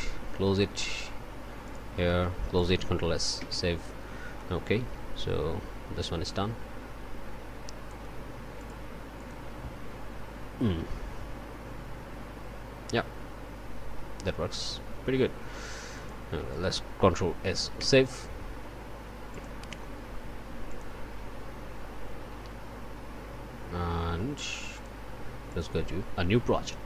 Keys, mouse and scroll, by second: 0.6 click, 1.6 click, 1.8 middle click, 2.1 middle click, 2.5 ctrl+middle click, 3.4 ctrl+s, 4.4 middle click, 5.3 o, 6.3-8.1 middle drag, 8.6 click, 9.2 click, 16.0 click, 16.5 ctrl+click, 17.8 ctrl+s, 19.3 click, 20.7 click, 24.8 click, 25.5-26.8 drag.